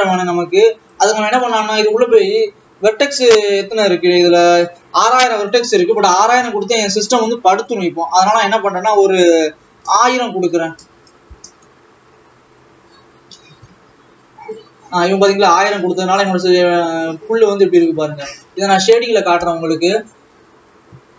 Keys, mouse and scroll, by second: 1.4 Tab, 5.8 Tab, 11.8 KP_0, 14.0 alt+a, 15.3 click, 18.9 ctrl+s, 20.2 click.